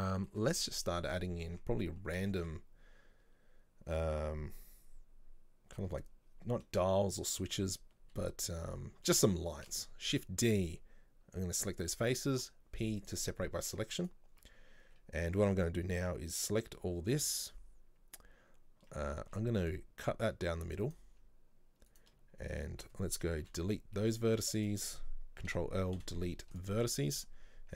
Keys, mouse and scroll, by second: 0.4-0.9 middle drag, 0.9 right click, 1.2-1.6 scroll up 2, 1.6 Tab, 2.4 shift+middle click, 2.8 scroll down 2, 9.7 shift+d, 12.4 p, 13.4-13.8 scroll down 1, 13.8 Tab, 14.1 right click, 14.5 Tab, 15.0 a, 19.3 ctrl+r, 22.0 right click, 23.5 Delete, 24.7 right click, 25.6 ctrl+l, 26.1 Delete.